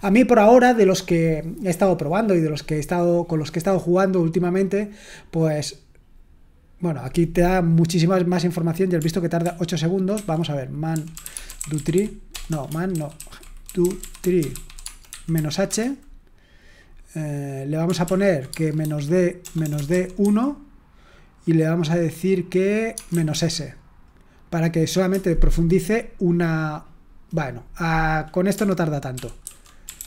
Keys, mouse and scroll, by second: 9.4 ctrl+p, 10.1 ctrl+c, 10.6-16.1 typing, 12.9 ctrl+w, 13.1 ctrl+w, 18.0 ctrl+p, 18.5-20.2 typing, 22.8-23.8 typing, 25.0 Return, 29.1 ctrl+p, 29.4 ctrl+a, 29.6-30.0 typing.